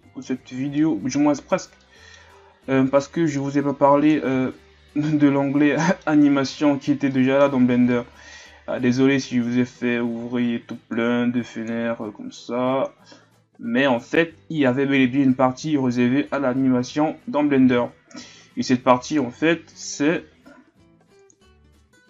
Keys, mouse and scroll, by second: 0.0 click, 0.4-0.8 scroll down 2, 0.8-1.8 middle drag, 1.8 scroll up 1, 1.9-3.5 middle drag, 3.5-4.3 drag, 4.3 alt+a, 4.6-5.8 scroll down 7, 5.8-6.4 middle drag, 6.4-7.1 scroll up 1, 7.1-7.6 middle drag, 7.6-9.9 scroll up 2, 19.2-22.0 drag.